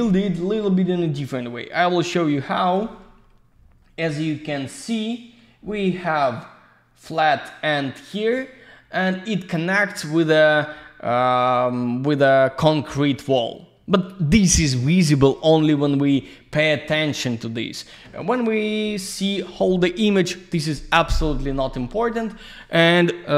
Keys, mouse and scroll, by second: 2.9 click, 3.4 ctrl+scroll up 1, 4.8 click, 5.6 ctrl+scroll up 1, 8.4 ctrl+scroll down 1, 13.8 ctrl+scroll down 1.